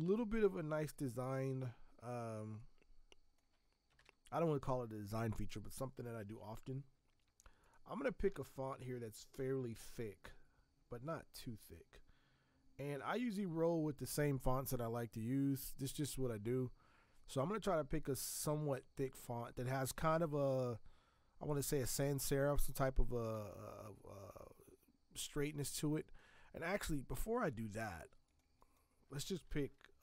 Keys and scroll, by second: 4.0 ctrl+shift+Return, 29.8-30.0 typing.